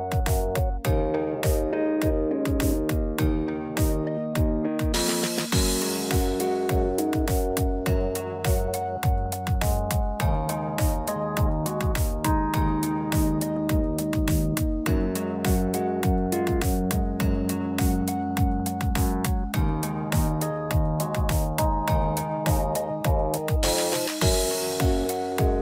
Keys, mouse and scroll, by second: 0.2-0.6 shift+scroll down 3, 0.9 middle click, 6.7 alt+e, 11.2 middle click, 11.7 Tab, 12.0 middle click, 12.7 scroll up 1, 13.3 middle click, 13.3 scroll up 2, 14.9 Tab, 16.4 scroll down 1, 17.7 scroll down 1, 17.7 a, 18.2 middle click, 19.1 scroll up 1, 20.0 click, 20.0-20.7 scroll up 2, 21.6-22.5 scroll down 3, 22.0 Tab, 22.5 click, 22.8-23.2 scroll down 3, 23.2 middle click, 24.2-24.6 scroll up 1, 24.6 Tab, 24.9 click.